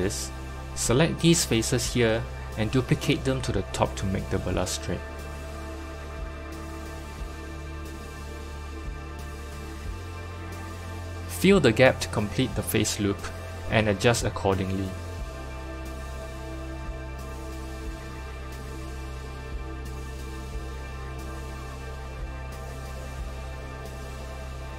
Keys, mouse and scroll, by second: 0.5-1.7 scroll down 1, 1.7 3, 3.0 click, 4.5 click, 5.1 shift+middle click, 5.9 shift+d, 11.4 click, 11.8 s, 15.3-17.9 middle drag, 17.9 KP_3, 19.3 click, 20.1 g, 22.6 middle click, 23.5 Tab, 23.9-24.7 middle drag.